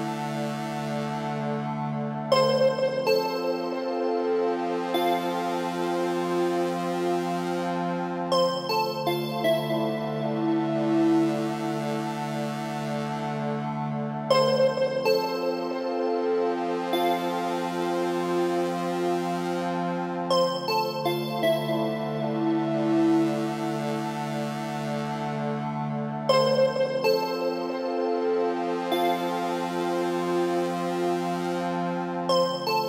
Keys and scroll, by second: 14.7 Left, 16.4 Right, 21.1 ctrl+g, 25.8 Return.